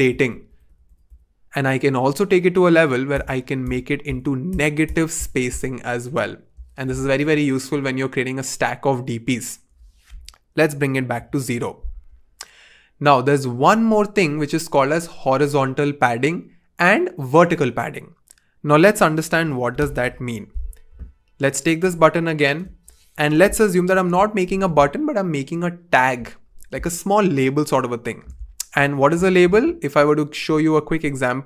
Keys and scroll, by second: 10.6 0, 11.1 Return, 20.0 BackSpace, 23.8 alt+super+b.